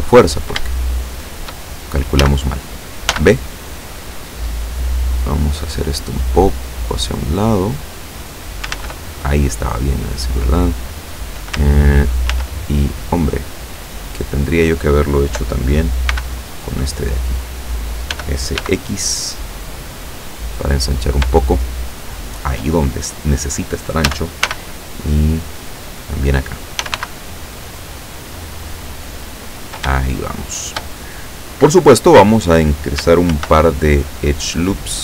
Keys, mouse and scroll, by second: 0.7 shift+click, 2.3 a, 3.1 b, 3.5 click, 4.6-5.9 drag, 6.7 click, 8.8 ctrl+z, 12.3 ctrl+z, 16.1 b, 16.4 click, 18.1 s, 18.6 x, 20.9 click, 21.4 shift+middle click, 21.6 shift+scroll up 1, 24.1 a, 24.5 b, 25.3-26.3 drag, 26.9 s, 27.1 x, 29.5 click, 30.1 shift+middle click, 33.4 ctrl+r.